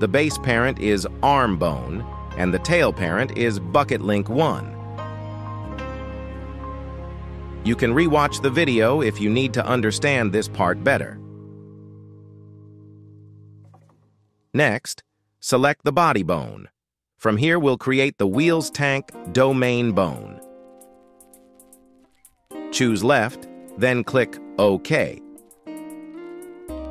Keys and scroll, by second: 6.3 g, 7.2 Escape, 15.4 g, 16.7 Escape.